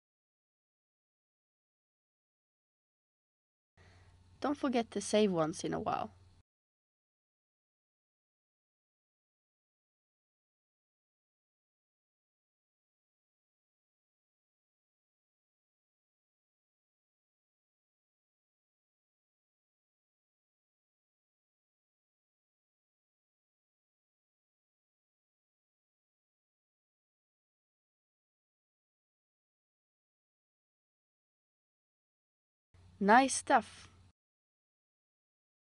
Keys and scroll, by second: 1.8 super+c, 2.4 super+d, 13.8 super+c, 14.1 super+d, 23.7 super+s, 33.8 space.